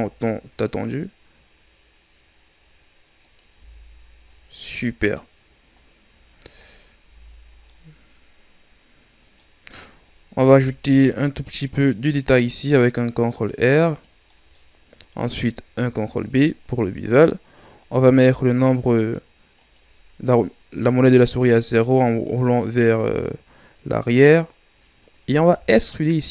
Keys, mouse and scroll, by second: 3.5 Tab, 4.2-4.6 scroll down 3, 4.6 middle click, 5.4-6.2 scroll up 6, 6.4-6.8 shift+scroll down 2, 6.8 scroll up 2, 7.0 Tab, 7.4 scroll down 2, 7.7-10.3 middle drag, 10.3 ctrl+r, 14.3 middle click, 14.5-15.7 scroll up 2, 15.7 ctrl+b, 22.5-23.1 scroll down 3, 23.1-23.9 scroll down 1, 23.9-24.2 scroll down 1, 24.2-25.4 scroll up 3, 25.4 e.